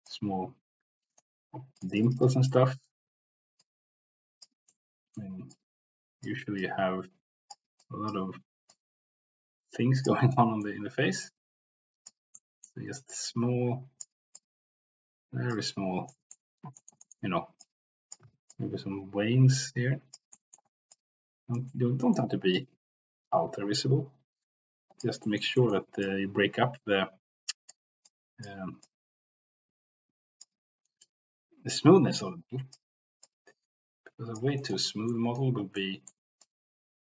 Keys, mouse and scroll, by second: 0.1-1.2 drag, 1.8 click, 2.4 middle click, 3.6 click, 4.7 middle click, 5.4 click, 6.5 click, 7.8 click, 8.7-10.0 drag, 10.3 middle click, 11.2 click, 12.3 middle click, 13.1 click, 14.4-15.5 drag, 16.1 middle click, 16.7 shift+middle click, 17.0 middle click, 17.6 click, 18.3 ctrl+z, 18.5-20.2 drag, 20.3 middle click, 20.8 click, 21.2 c, 21.7 middle click, 22.5-25.0 drag, 25.2 middle click, 25.6 shift+middle click, 26.0-27.7 drag, 28.0 click, 28.7-30.4 drag, 31.0-32.7 drag, 33.2-34.3 drag, 34.5 middle click, 35.1 middle click, 35.8 middle click, 36.4 click.